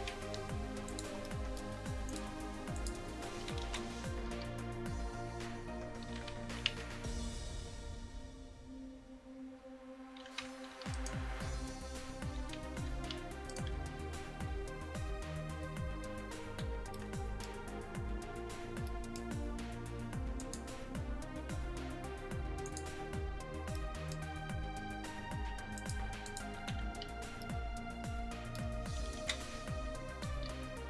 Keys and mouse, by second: 3.7 KP_1, 4.3 r, 6.8 r, 11.0-12.9 right drag, 11.4 r, 13.5-13.8 right drag, 13.8 r, 20.4-24.6 drag, 25.8-28.2 drag, 29.2 KP_1, 29.9-30.8 middle drag, 30.4 r.